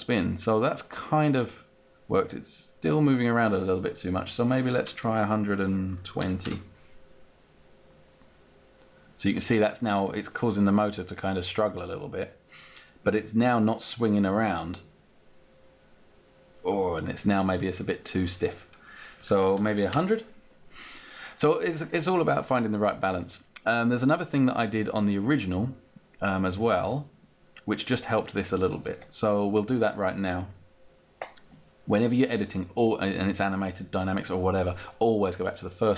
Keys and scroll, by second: 5.1-6.6 typing, 18.5 1, 19.7 0, 19.8 Return, 20.7 Return.